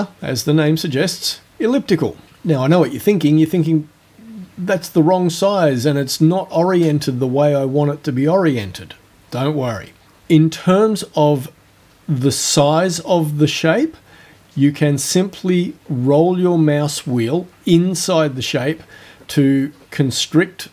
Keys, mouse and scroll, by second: 1.2 click, 14.2-15.0 scroll up 2, 15.3-16.0 scroll up 1, 16.2-16.9 scroll up 1, 17.0-17.6 scroll up 2, 17.8-18.8 scroll up 2, 18.9-19.2 scroll up 2, 19.5 scroll up 2.